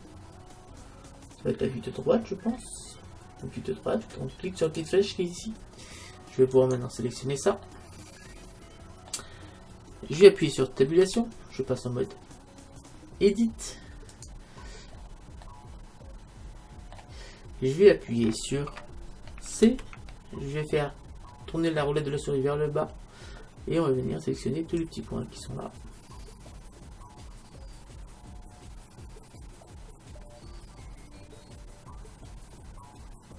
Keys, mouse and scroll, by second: 2.0-4.7 middle drag, 2.0-4.7 scroll down 1, 4.7-6.7 drag, 6.7-8.5 right drag, 8.5-11.7 middle drag, 11.1 Tab, 14.9-19.4 middle drag, 19.7 c.